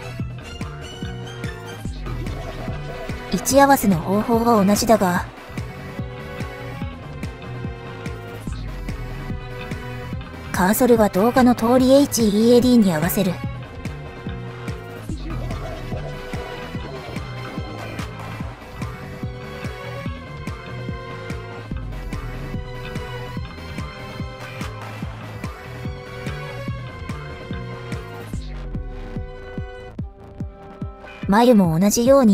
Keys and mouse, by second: 5.5 click, 6.7 click, 13.1 shift+s, 17.0 click, 20.1 click, 21.3 shift+s, 25.8 click, 29.1 click, 30.8-32.3 drag.